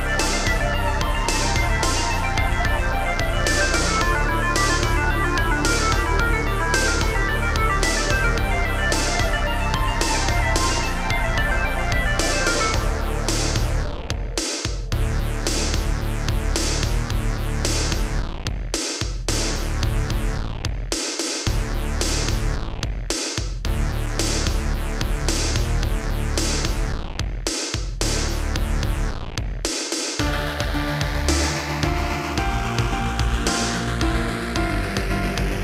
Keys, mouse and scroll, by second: 0.2 Right, 0.7 Left, 2.0 Right, 2.9 Left, 3.9 scroll down 3, 4.3 shift+middle click, 4.7 middle click, 6.2 shift+middle click, 7.5 click, 7.6 click, 10.2 middle click, 11.6 Left, 13.3 7, 14.4 g, 17.0 click, 17.9 ctrl+c, 18.3 Right, 18.9 ctrl+v, 19.8 Right, 20.6 Left, 21.7 Left, 22.4 Left, 23.0 Right, 24.3 scroll up 2, 26.2 click, 27.7 shift+click, 28.9 b, 29.0 click, 30.7 shift+click, 31.7 g, 34.2 click, 34.3 click, 34.8 middle click.